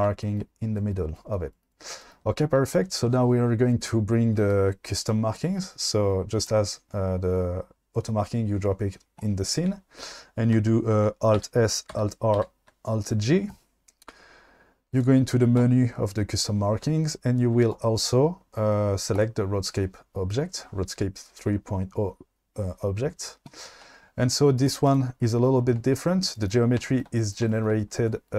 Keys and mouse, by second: 11.5 alt+s, 12.0 alt+r, 12.4 alt+g, 24.6 click, 25.0 click.